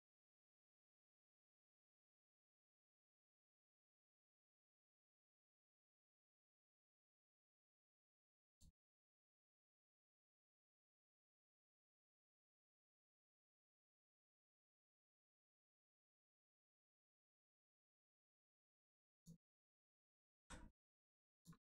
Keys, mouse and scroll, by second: 0.8 click, 9.1 shift+middle click, 10.9 shift+click, 20.3 x, 21.3 click.